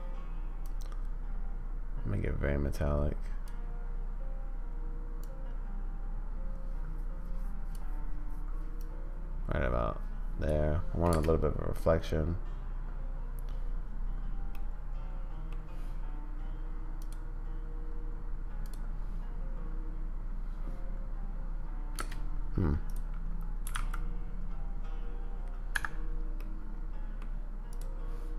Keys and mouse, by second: 0.7-3.7 drag, 5.3-7.9 drag, 8.9-10.7 drag, 11.1 space, 14.5-15.0 drag, 15.0 middle click, 22.0 space, 23.6 g, 26.4-27.2 middle drag, 27.7-28.3 drag.